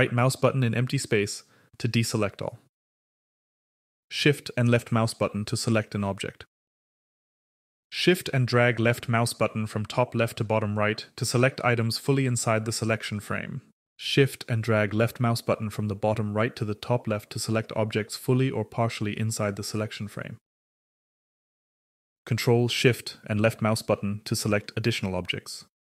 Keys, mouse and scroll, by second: 4.0-7.2 shift+drag, 7.9-13.9 shift+drag, 14.1-20.0 shift+drag, 22.2-25.8 ctrl+shift+drag.